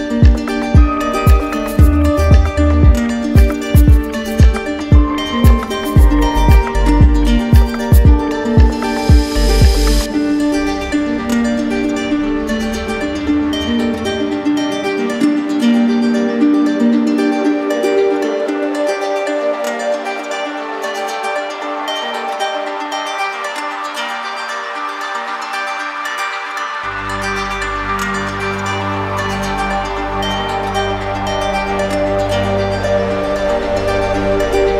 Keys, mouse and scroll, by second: 2.7 click, 3.8 click, 7.1 ctrl+click, 9.1 right click, 10.8 right click, 11.3 right click, 12.0 click, 12.7 right click, 14.7 click, 15.6 right click, 16.3 ctrl+d, 21.1 q, 22.1 ctrl+d, 22.7 ctrl+d, 24.2 right click, 25.0 alt+right click, 26.7 right click, 27.4-29.5 alt+right drag, 29.5-30.6 drag, 31.3-32.3 ctrl+drag, 31.3 right click, 33.0 ctrl+d, 34.4 alt+right click.